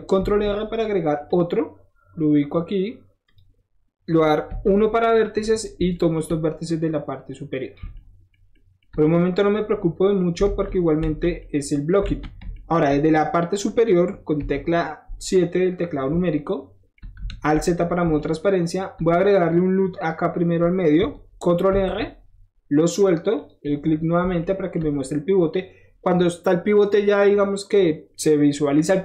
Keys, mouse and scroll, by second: 0.1 ctrl+r, 1.2 click, 3.2 click, 5.0 click, 6.1 shift+middle click, 6.6-7.7 shift+drag, 7.7 shift+middle click, 8.3 shift+middle click, 8.8 shift+middle click, 9.0 shift+middle click, 9.4 scroll down 1, 9.6-10.9 shift+middle drag, 10.4 alt+z, 11.0 alt+z, 12.0 alt+z, 14.3 KP_7, 15.2 middle click, 15.5 scroll up 1, 16.2 shift+middle click, 17.2 alt+shift+z, 18.0 alt+shift+z, 21.6 ctrl+r, 22.8 click, 23.3 click, 24.4-29.0 shift+middle drag.